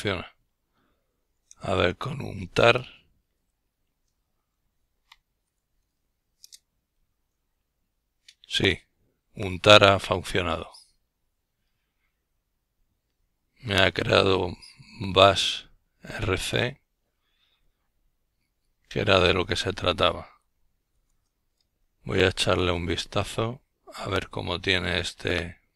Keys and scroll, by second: 11.4-12.8 typing, 15.7 typing, 17.8-20.2 typing, 21.0 Return, 23.0-24.1 Down, 23.6-24.6 typing.